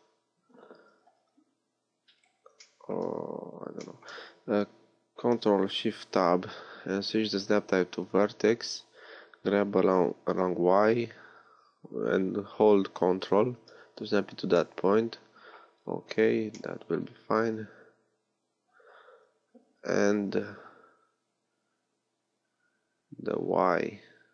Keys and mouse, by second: 1.0 g, 2.6-4.5 drag, 5.7 ctrl+shift+Tab, 9.7 g, 17.4 a, 19.4 Tab.